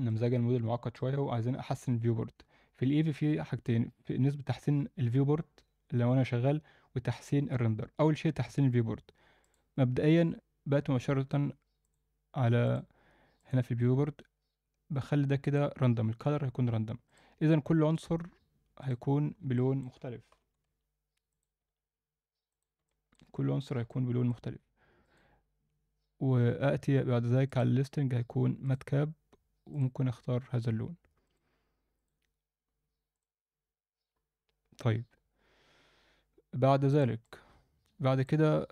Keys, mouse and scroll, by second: 0.1-1.0 alt+middle drag, 9.4-11.9 drag, 12.7 click, 13.4-16.2 drag, 17.1 click, 17.9 click, 18.8 click, 19.2 scroll down 1, 19.5 alt+middle click, 20.0 scroll down 2, 20.3 g, 21.6 s, 22.8-23.2 alt+middle drag, 23.3 scroll up 1, 23.6 alt+a, 23.9-24.3 alt+middle drag, 25.0-30.0 drag, 31.2-36.4 drag, 36.9 click, 37.2-38.2 middle drag.